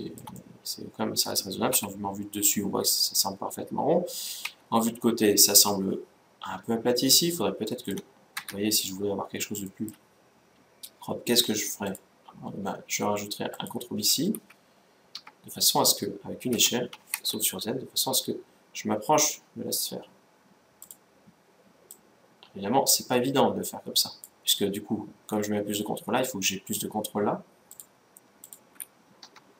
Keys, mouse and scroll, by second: 1.5 KP_7, 4.2 KP_1, 7.5-11.1 middle drag, 8.1 Tab, 11.2 middle click, 11.6-13.4 drag, 15.3-17.2 middle drag, 16.3 s, 21.7-23.4 drag, 27.4-29.4 drag.